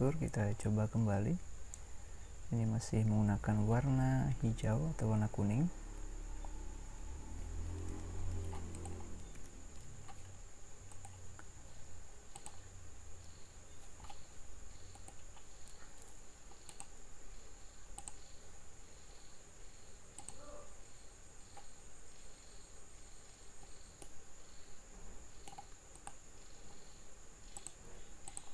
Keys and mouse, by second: 7.9 Escape, 9.3 Escape.